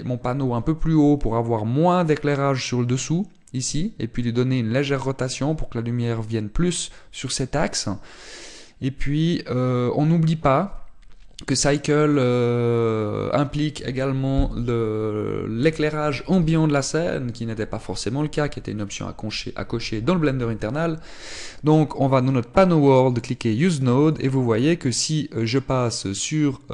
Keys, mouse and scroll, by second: 24.0 click, 24.9 click.